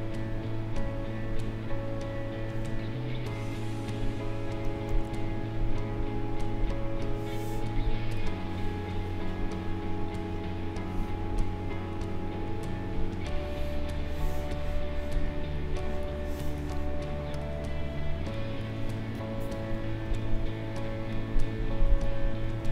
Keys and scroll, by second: 19.8 Delete, 22.2 Delete.